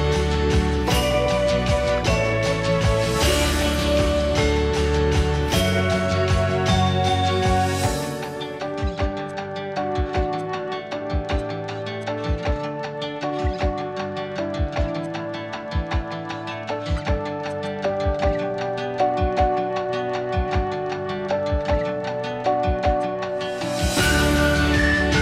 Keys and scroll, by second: 0.8 Escape, 1.5 p, 3.2 Escape, 6.3 l, 7.8 p, 9.6 Escape, 10.8 m, 12.3 s, 12.9 Escape, 17.3 q, 19.1-20.3 typing, 21.9-22.6 typing.